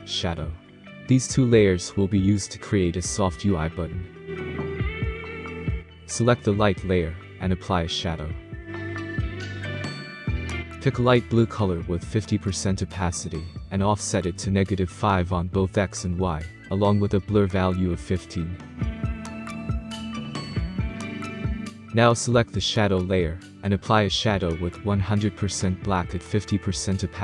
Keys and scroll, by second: 15.7-16.8 typing, 18.1 typing, 18.4 Tab, 19.2-20.1 typing, 20.1 Return.